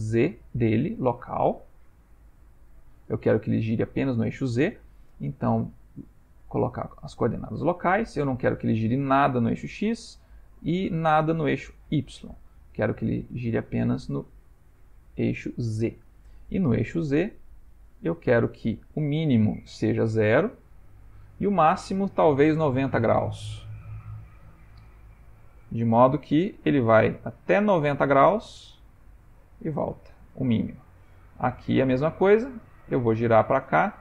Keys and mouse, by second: 0.6 shift+middle click, 1.1 ctrl+middle click, 5.4 click, 9.8 click, 11.9 click, 16.8 middle click, 18.3 ctrl+middle click, 19.0 middle click, 21.0 click, 22.8 click, 25.5 r, 31.5 click, 32.6 r.